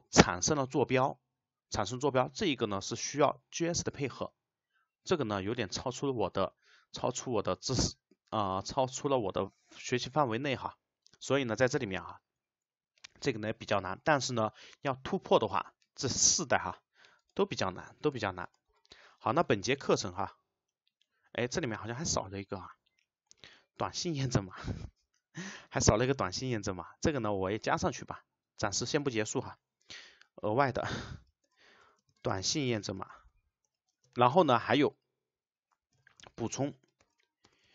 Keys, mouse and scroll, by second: 17.2 click, 18.5 click, 30.9 space, 31.5 shift+;, 32.4 space, 34.0 space, 34.4 Return, 36.6 space, 37.1 shift+', 37.5 BackSpace.